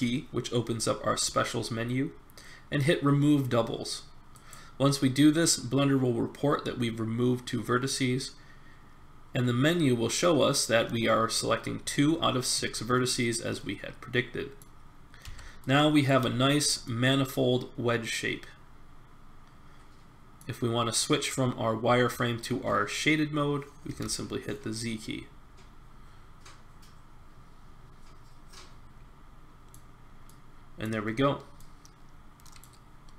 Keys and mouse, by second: 12.7-14.3 middle drag, 15.2 Tab, 23.8 z, 24.7-25.5 middle drag, 30.0-33.1 middle drag.